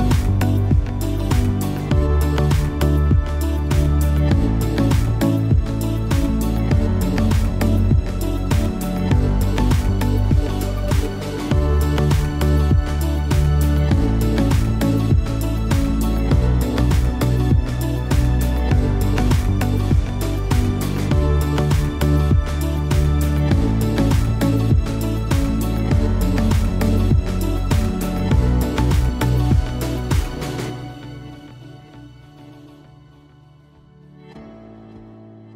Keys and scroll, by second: 10.2 shift+v.